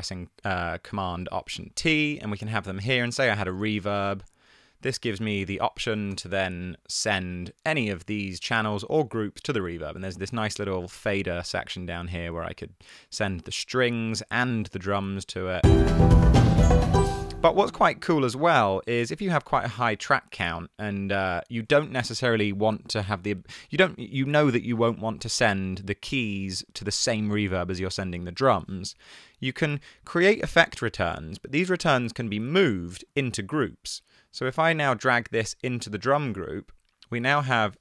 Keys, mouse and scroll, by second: 1.6 alt+super+t, 2.3 super+z, 4.5-5.5 typing, 5.9 Down, 6.1 Return, 7.1 typing, 16.1 space, 17.1 space, 17.3 super+z, 17.9 super+z, 37.7 super+r.